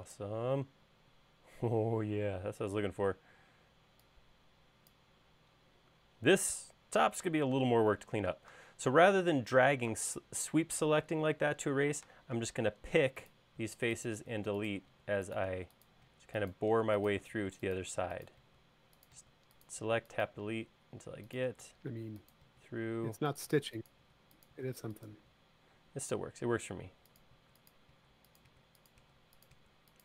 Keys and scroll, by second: 8.4 space, 13.7-18.5 typing, 21.5 BackSpace, 23.6-25.2 typing, 27.4-30.0 typing.